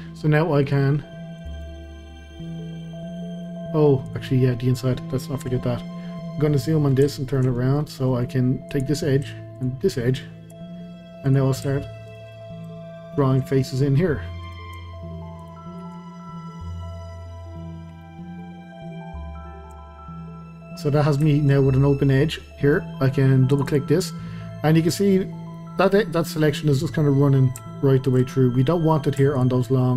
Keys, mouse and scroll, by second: 0.6-1.5 drag, 1.6 drag, 1.8-4.1 middle drag, 4.1 click, 4.3-5.4 scroll down 1, 5.4 KP_Decimal, 5.9 scroll down 1, 6.2-8.7 middle drag, 8.7 click, 9.6 shift+click, 10.6 f, 11.3 click, 12.1 shift+click, 12.3 f, 12.7-14.4 shift+middle drag, 14.4 click, 15.4 shift+click, 15.8 f, 16.2-18.0 middle drag, 18.0 scroll down 1, 18.1-20.2 middle drag, 20.2 scroll down 1, 20.5-21.6 middle drag, 21.6-22.1 scroll up 1, 22.4-23.5 middle drag, 23.5 click, 23.7 click, 24.1-27.1 middle drag, 27.7-29.3 shift+middle drag, 29.3 shift+click.